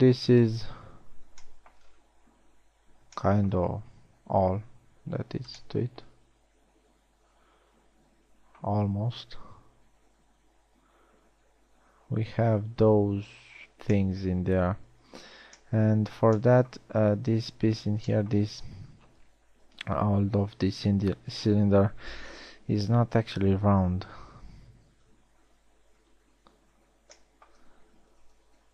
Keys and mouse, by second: 0.9 KP_1, 1.8 z, 5.4 z, 8.3-8.7 middle drag, 10.0 KP_1, 10.6 z, 15.9 z, 24.2 KP_1, 24.6 KP_3, 25.6 z, 27.0 z, 27.4 z.